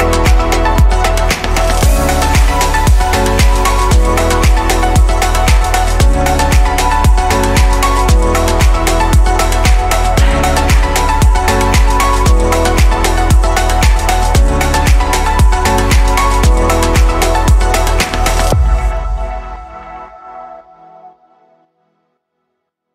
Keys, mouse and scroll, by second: 10.1 shift+d, 12.1-13.6 drag, 19.1-19.7 scroll up 3, 19.7-20.2 shift+middle drag, 20.2-22.0 scroll up 2, 22.0-22.9 drag.